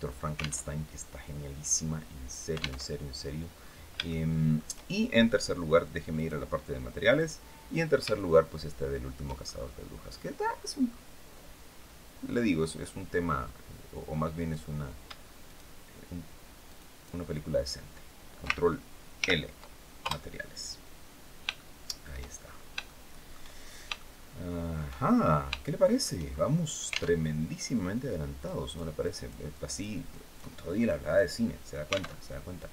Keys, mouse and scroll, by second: 0.3 alt+Tab, 2.5 alt+Tab, 3.1-3.5 scroll down 2, 3.7 shift+middle click, 5.8 click, 6.8 click, 7.8-8.9 shift+middle drag, 9.1-9.9 shift+scroll up 1, 10.2 scroll down 1, 14.0 right click, 15.1 shift+right click, 16.3 shift+right click, 18.8 ctrl+l, 19.7 ctrl+Return, 20.9 scroll down 2, 21.2 shift+middle click, 22.1-22.4 shift+scroll up 3, 22.5 shift+middle click, 23.2 shift+scroll down 2, 23.6 shift+middle click, 24.7-25.1 shift+scroll up 3, 25.3 shift+click, 26.0-26.3 shift+scroll up 2, 26.9 alt+Tab, 28.1 click, 28.7 click, 29.3 click, 29.8 click, 30.5 click, 31.8 alt+Tab.